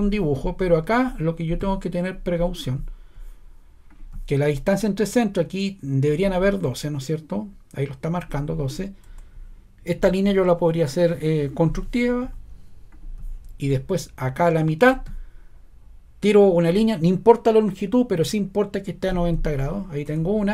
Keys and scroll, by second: 9.0 ⟲, 20.0 ↻.